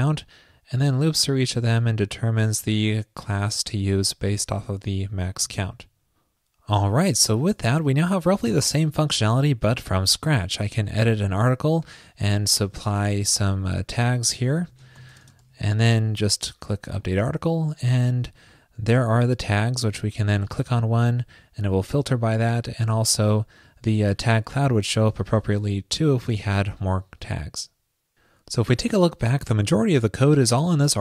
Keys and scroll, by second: 5.6 super+s.